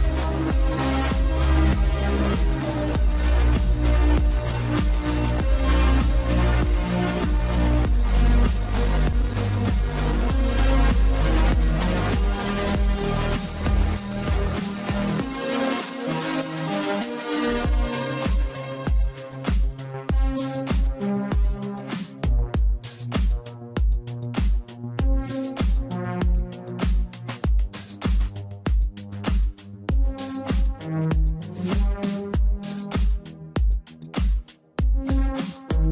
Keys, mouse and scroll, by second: 0.4 ctrl+z, 1.1 Tab, 2.9 e, 5.9 e, 19.0 scroll down 2, 19.9-23.6 middle drag, 23.6 click, 24.5 click, 27.1 a, 28.1-29.2 middle drag, 29.2 scroll up 2, 31.1 e, 34.7-35.9 middle drag.